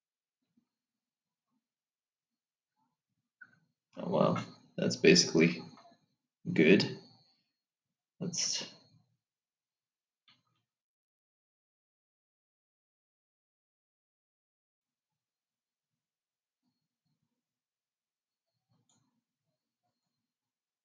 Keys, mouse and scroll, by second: 11.3 ctrl+r.